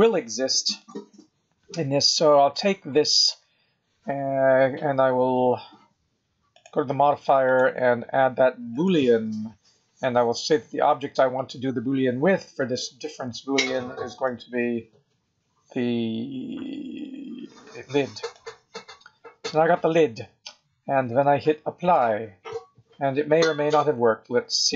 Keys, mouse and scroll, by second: 0.7 click, 6.5 click, 7.4 click, 14.1 click, 21.7 click, 23.5 click.